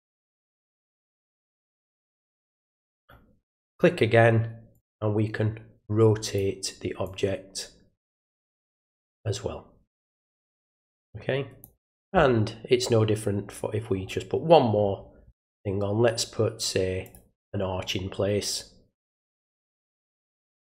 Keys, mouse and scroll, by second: 0.2-1.1 drag, 1.9-3.0 drag, 3.6 click, 4.7-6.3 drag, 7.0-8.2 drag, 8.9-11.6 drag, 13.4 scroll down 1, 13.9 scroll up 1, 17.0 click, 19.8-20.7 drag.